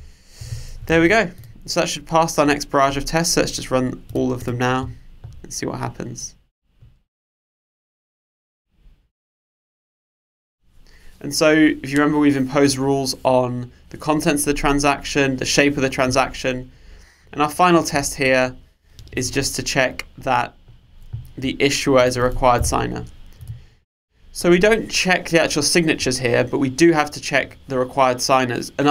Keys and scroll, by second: 1.0 super+s, 22.7 super+/.